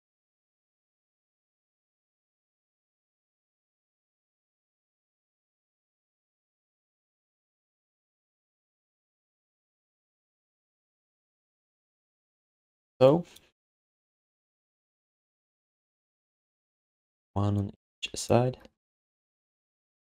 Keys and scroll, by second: 3.6 w, 10.6 ctrl+s, 17.1 ctrl+d, 18.7 space, 19.1 space.